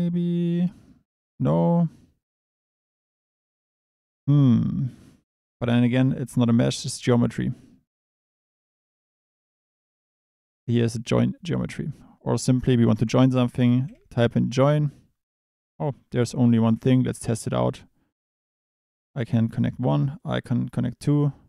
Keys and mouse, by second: 17.2 click, 19.6 drag, 20.2 drag.